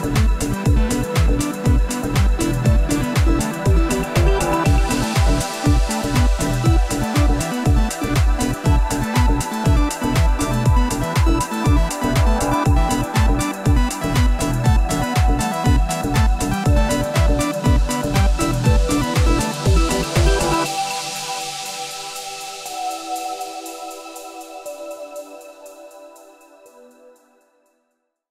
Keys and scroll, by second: 16.7 F11.